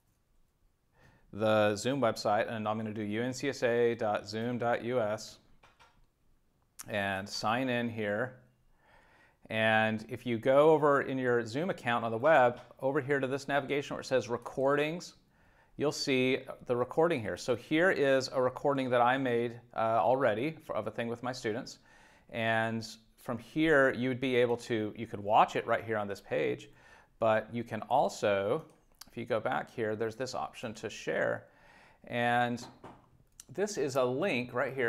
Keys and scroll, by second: 0.0-0.5 typing, 3.6 z, 4.4 Return.